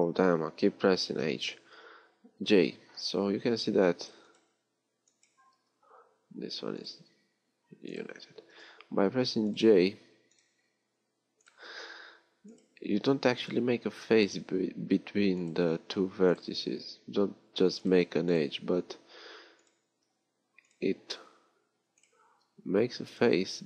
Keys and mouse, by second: 1.2 alt+h, 1.8 j, 8.6 j, 11.8-14.0 drag, 14.0 j, 22.6 j.